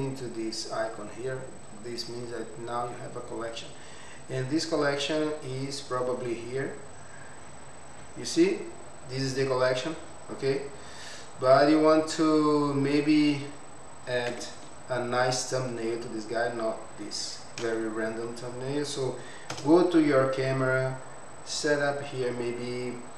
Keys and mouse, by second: 2.2 click, 5.5-8.0 drag, 14.3 n, 19.5 KP_0, 21.2 click, 22.3-23.1 drag.